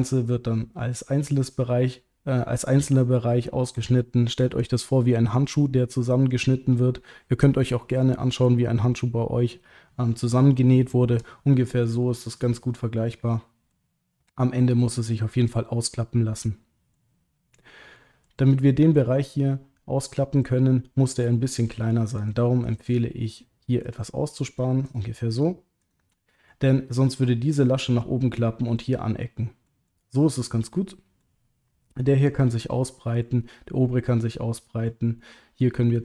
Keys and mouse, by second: 12.0-13.7 middle drag, 16.0 middle click, 17.9 middle click, 18.6 middle click, 21.4 middle click, 22.2 shift+click, 22.6 shift+click, 23.8 shift+click, 25.4 shift+click, 25.8 shift+click, 26.2 middle click, 29.3 middle click, 29.9-31.2 middle drag, 32.3 middle click, 33.9 middle click, 35.2 middle click, 35.9 middle click.